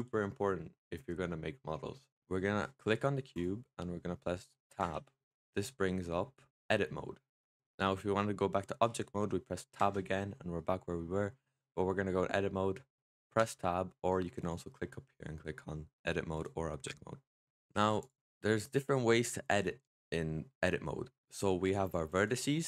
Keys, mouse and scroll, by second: 3.2 click, 4.7 Tab, 5.6-9.6 middle drag, 9.6 Tab, 10.4-13.2 middle drag, 13.2 Tab, 14.3-17.6 drag, 17.6 middle click, 17.9 click, 21.0-22.1 scroll up 2, 22.1 click.